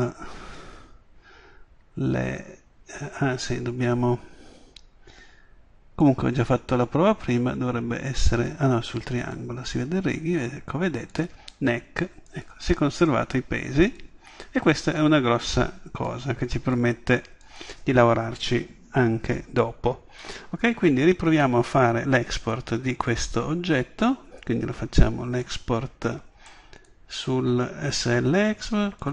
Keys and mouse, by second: 4.9-6.0 middle drag, 7.8-9.2 middle drag, 11.1 middle click, 19.2 middle click, 21.3 Tab.